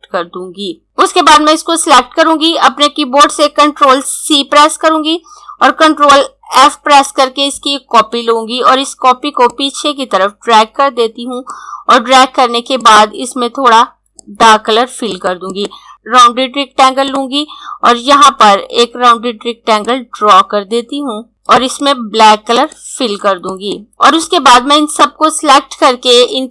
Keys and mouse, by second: 3.8 ctrl+Num_Lock, 4.3 ctrl+c, 9.2 click, 19.8 click.